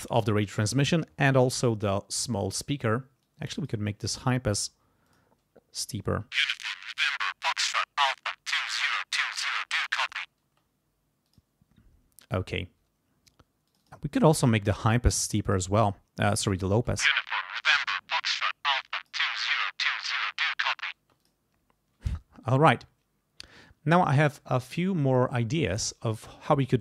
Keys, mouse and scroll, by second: 3.2 click, 4.1 click, 5.1 click, 5.8 click, 6.1 space, 7.0-9.3 drag, 10.5 space, 11.3 click, 13.7 click, 14.6 click, 15.4 click, 16.7 space, 21.0 space, 21.2 click.